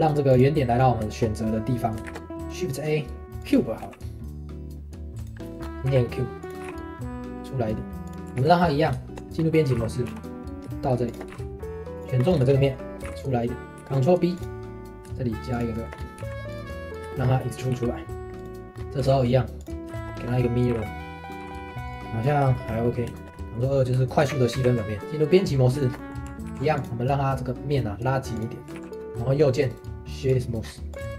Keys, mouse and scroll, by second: 1.1-2.0 shift+middle drag, 2.0 shift+a, 5.4 middle drag, 5.6 scroll up 2, 5.9 s, 8.2 middle click, 8.4 ctrl+z, 8.7 middle click, 8.9 Tab, 9.4 scroll down 1, 9.5 middle click, 9.7 g, 11.3 g, 11.9 3, 11.9 click, 12.2 scroll up 2, 12.4 shift+middle click, 13.0 g, 13.6 scroll up 1, 13.8 ctrl+r, 15.7 shift+middle click, 15.9 scroll up 1, 16.2 3, 16.5 click, 16.7-17.7 middle drag, 17.7 e, 18.7 scroll down 2, 19.0 alt+x, 19.6 click, 19.9 shift+middle click, 20.3-20.7 scroll up 2, 20.7 g, 21.4 g, 22.0 middle click, 22.0-22.5 scroll up 5, 22.5-24.2 shift+middle drag, 24.2 ctrl+3, 25.0 Tab, 25.3-26.5 middle drag, 26.5 ctrl+r, 28.7 ctrl+r, 28.9-29.4 scroll up 4, 29.4 middle drag, 29.7 right click, 30.6 scroll down 2, 30.9 click, 31.0 q.